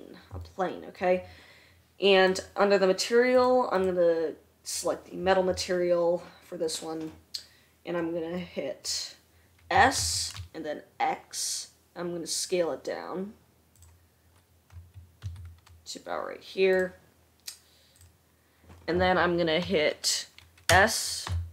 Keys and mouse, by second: 4.2-14.3 drag, 10.2 s, 14.3-21.5 middle drag, 15.2 s, 21.1 s.